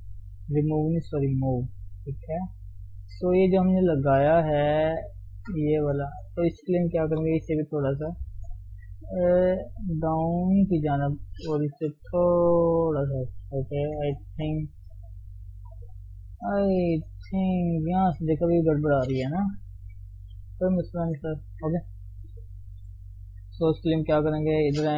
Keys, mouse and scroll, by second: 0.5-1.2 scroll up 3, 1.2 shift+z, 1.5-3.3 middle drag, 3.3 click, 3.5 scroll down 2, 3.6 shift+middle click, 4.3 shift+click, 4.6-6.1 middle drag, 6.1 ctrl+click, 7.0 KP_3, 8.3 g, 11.3 click, 12.0 g, 13.1 scroll down 1, 13.4 Tab, 13.6 middle click, 14.1 ctrl+1, 14.3 middle click, 14.7-15.2 scroll down 1, 15.2 KP_1, 15.9 KP_3, 16.1-16.8 scroll up 1, 16.8 shift+middle click, 17.0 scroll up 1, 17.3 middle click, 18.0-18.3 scroll down 2, 18.4 Tab, 19.1 Tab, 19.9 ctrl+0, 20.6 KP_3, 21.5 Tab, 22.0 shift+middle click, 22.9 click, 23.8 click, 24.3 alt+shift+click.